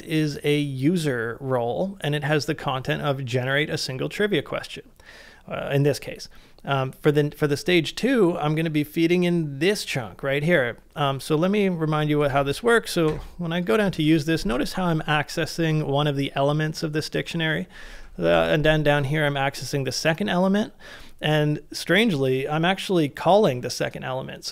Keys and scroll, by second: 12.4 ctrl+c, 13.1 shift+8, 13.9 shift+v, 18.3 shift+8.